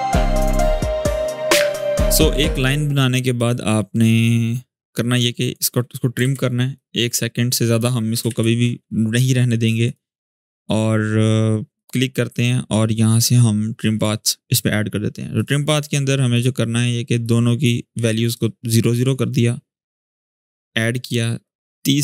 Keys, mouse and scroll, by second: 0.4 click, 3.1 click, 6.0 alt+[, 6.5-7.7 drag, 8.0 alt+], 9.6 click, 13.7 click, 17.3-17.6 click, 18.3-18.9 shift+click, 20.0-20.6 click, 21.2-22.0 drag.